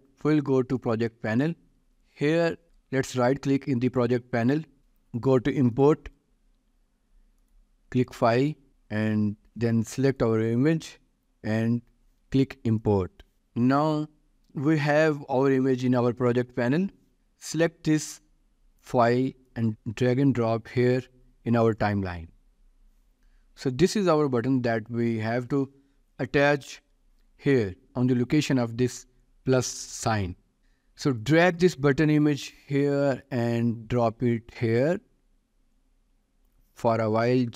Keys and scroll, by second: 14.4 ctrl+s, 26.0 ctrl+s.